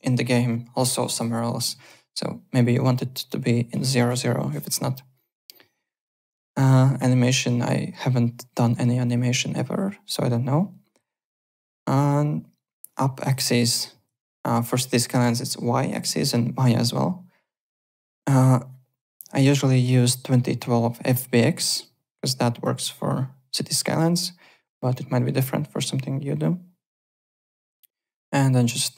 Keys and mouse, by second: 1.7 ctrl+z, 13.2 click, 19.1 click, 21.8 click.